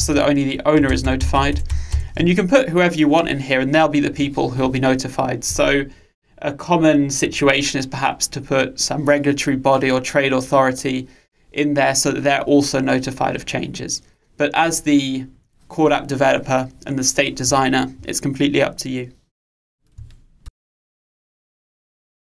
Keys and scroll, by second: 0.9 Delete.